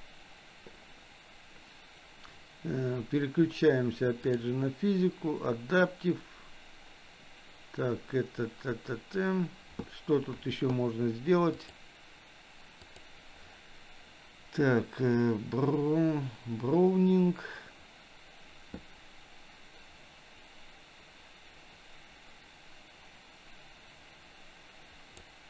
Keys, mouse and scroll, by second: 4.2 click, 11.6 click, 12.8 click, 19.0-25.2 drag.